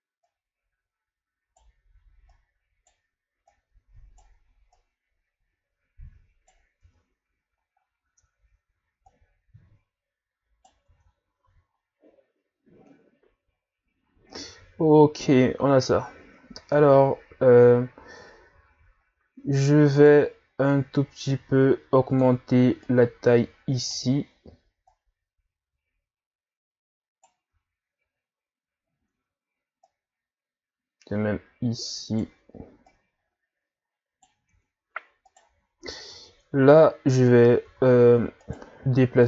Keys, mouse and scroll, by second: 0.2 right click, 2.3 right click, 3.5 right click, 4.7 right click, 6.8 Tab, 7.8 scroll up 1, 8.1 Tab, 9.1 right click, 10.8 Tab, 11.4 a, 11.7-12.8 scroll down 3, 12.8 scroll down 2, 14.3 scroll up 2, 17.6 scroll up 2, 18.7-19.1 scroll down 1, 19.1 scroll up 1, 19.4 Tab, 20.0 right click, 20.7-22.8 drag, 22.8 right click, 24.9 right click, 27.5 Tab, 28.2-28.8 scroll down 1, 28.8 scroll up 1, 29.1 Tab, 29.8 right click, 32.9 right click, 34.4 Tab, 35.2 right click, 36.1 Tab, 36.7 scroll up 2, 37.7 z, 38.4 right click, 38.8 b.